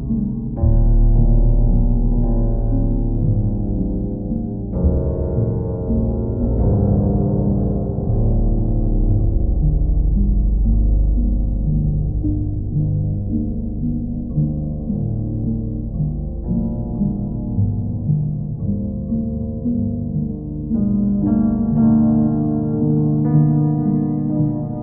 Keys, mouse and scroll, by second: 0.2 click, 0.6 click, 2.2 click, 2.7 click, 3.1 click, 4.0 click, 4.5 click, 6.9 click, 8.6 click, 9.3 click, 9.7 ctrl+click, 10.3 ctrl+click, 10.7 shift+click, 12.1 q, 14.1-15.1 drag, 15.8 click, 17.4 click, 18.4 click, 20.9 click, 22.3 click, 22.7 shift+click, 23.6 alt+click.